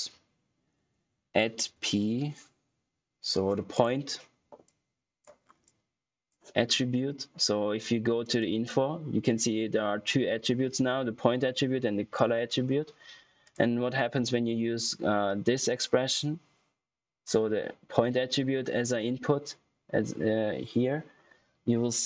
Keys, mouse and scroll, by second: 0.7 ctrl+q, 1.7 shift+p, 3.6 click, 5.3 scroll down 1, 5.6 click, 14.4 click.